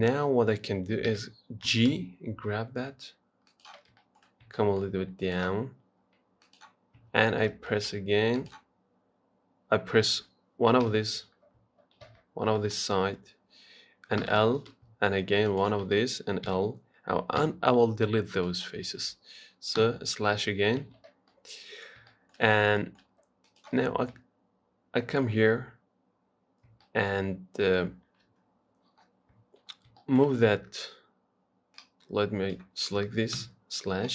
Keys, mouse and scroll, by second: 0.1-1.3 shift+middle drag, 1.3 g, 4.2 shift+middle click, 4.5 scroll up 3, 4.8 shift+middle click, 5.4 click, 6.7 click, 7.2 Tab, 7.5-7.9 scroll down 4, 7.9 shift+middle click, 8.6 click, 11.1 KP_Divide, 12.3 z, 12.8-14.5 shift+middle drag, 14.5 l, 15.7 shift+click, 16.7 l, 17.6 x, 19.1 Tab, 20.0 KP_Divide, 21.0 z, 21.5-22.7 middle drag, 22.7-23.0 scroll up 1, 23.0 shift+middle click, 23.7 click, 24.3-26.7 middle drag, 26.7-27.1 scroll down 1, 27.1-28.5 shift+middle drag, 28.5 KP_3, 29.9-30.2 scroll up 1, 30.2 shift+middle click, 30.6-31.9 scroll up 1, 32.0 click, 33.6 KP_Divide.